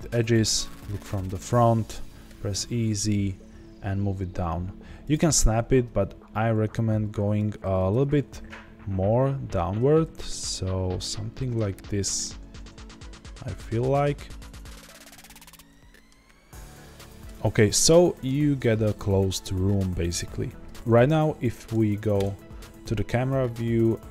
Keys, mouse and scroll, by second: 0.6 KP_1, 2.2 e, 5.1 ctrl+click, 6.1 scroll up 1, 7.2 Tab, 9.7 g, 15.1-18.2 middle drag, 16.1 scroll down 1, 17.2 Tab, 19.3 z, 22.1 KP_0, 23.0 scroll up 2, 23.2 z.